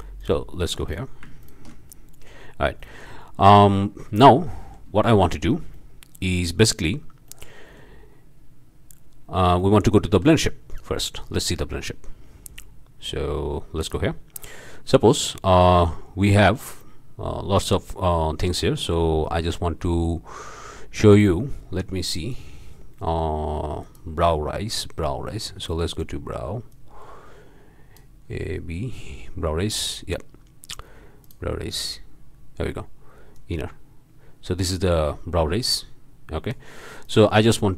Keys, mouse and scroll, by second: 0.2 ctrl+shift+click, 0.9 ctrl+shift+drag, 1.4 ctrl+shift+drag, 1.9 ctrl+shift+click, 2.8 click, 4.3-4.9 drag, 5.0-5.6 shift+drag, 5.7 shift+click, 7.3-8.0 drag, 10.1 alt+a, 10.4 alt+drag, 10.8-11.1 alt+drag, 11.2-11.9 alt+drag, 13.8-14.1 drag, 16.9 middle click, 18.2 middle click, 19.2 scroll up 2, 20.0-20.6 scroll up 4, 22.2 click, 23.8 click, 25.2-25.7 scroll down 1, 26.7-28.1 drag, 28.3-28.7 scroll down 1, 29.1-29.4 scroll up 1, 31.2-31.5 drag, 32.0 scroll up 1, 33.3-36.7 drag, 37.0 click.